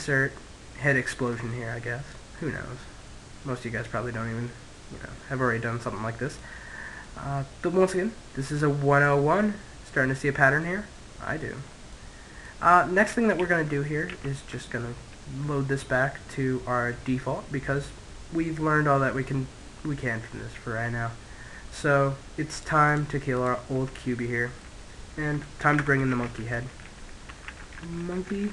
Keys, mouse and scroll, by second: 5.8-8.2 middle drag, 11.0-13.0 middle drag, 12.6 ctrl+z, 13.4 ctrl+z, 13.9-15.9 middle drag, 18.2 Tab, 18.8-20.5 middle drag, 20.7 Tab, 21.7-24.0 drag, 24.0-25.1 middle drag, 24.8 x, 25.3 space.